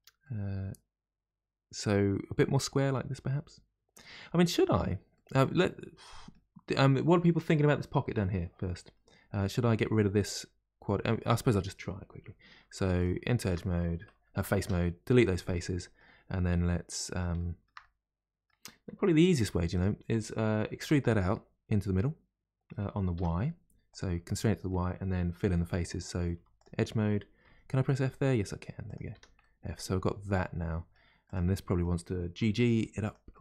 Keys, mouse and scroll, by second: 0.2-3.3 middle drag, 5.1-8.9 middle drag, 10.8-11.9 middle drag, 11.9-12.7 scroll up 1, 12.7 3, 12.9 click, 13.4 shift+click, 14.6 Delete, 15.5 middle click, 16.4-16.9 scroll up 2, 16.9-19.3 middle drag, 19.3 1, 19.7 click, 20.8 e, 24.3-26.3 middle drag, 26.3 2, 26.5 click, 27.4 f, 28.8 click, 29.1 f, 29.3 middle click, 29.9-30.3 scroll down 1, 30.3 middle click, 31.2 click, 31.5 middle click, 32.4 g, 33.3 middle click.